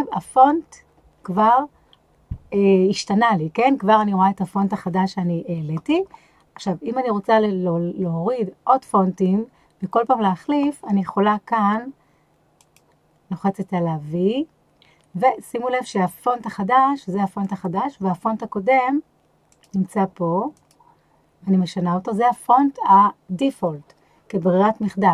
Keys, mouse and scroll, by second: 12.6-17.7 drag, 19.5 click.